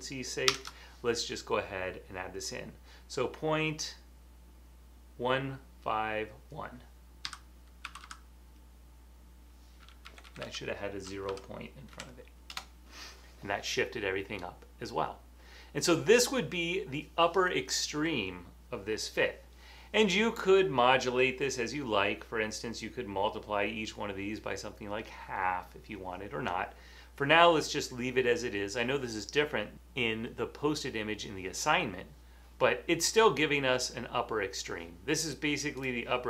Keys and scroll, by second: 1.6-2.4 typing, 7.1-8.5 typing, 10.0-12.5 typing.